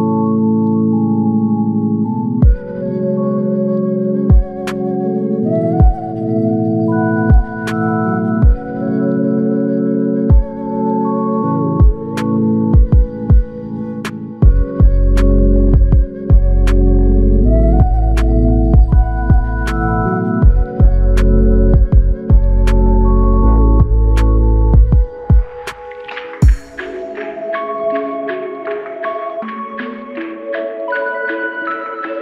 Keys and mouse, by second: 5.0 double click, 10.2-13.2 typing, 13.0 ctrl+click, 13.9 ctrl+click, 19.1 ctrl+alt+click, 21.6 alt+click.